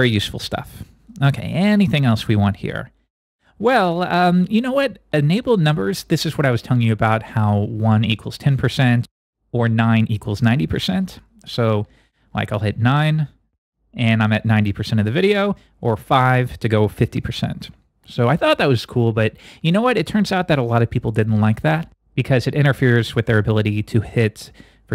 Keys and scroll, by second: 13.0 9, 16.0 5.